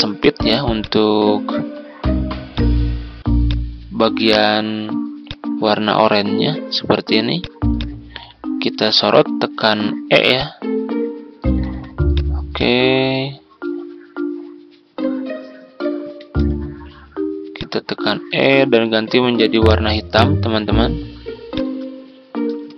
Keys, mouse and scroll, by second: 9.0 e, 10.3 click, 11.6 ctrl+z, 12.1-18.8 drag, 21.5 click, 22.5 Tab.